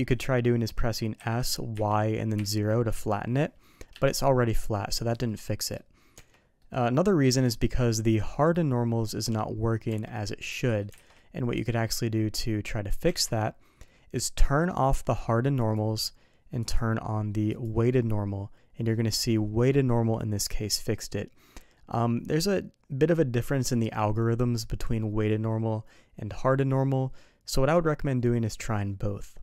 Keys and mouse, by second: 1.2 s, 5.3 middle click, 6.1 Tab, 6.6-7.1 middle drag, 7.9 click, 9.9 Tab, 10.2 middle click, 10.9 alt+a, 11.1-12.5 middle drag, 13.1 Tab, 15.6 click, 17.6 click.